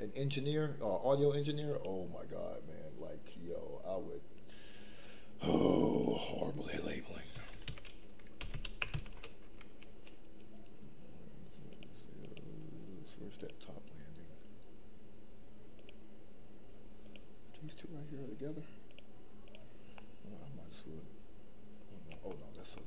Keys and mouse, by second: 1.7 click, 5.9 click, 6.2-9.2 drag, 11.7 click, 12.2 click, 13.3 click, 15.7 click, 17.0 click, 17.6 click, 19.4 click, 19.9-22.1 middle drag, 22.3 shift+middle click, 22.7 middle click.